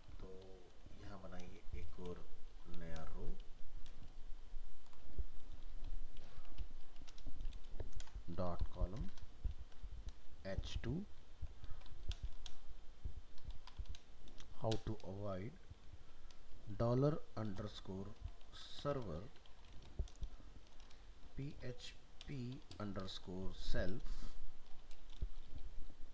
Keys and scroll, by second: 4.1 ctrl+z.